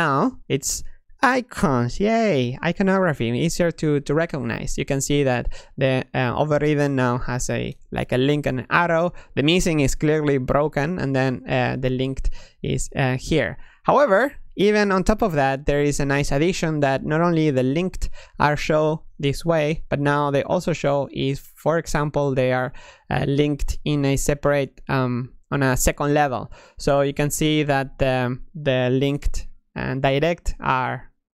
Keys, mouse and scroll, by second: 21.4 click, 22.8 click, 24.0 click, 24.7 click, 25.4 click.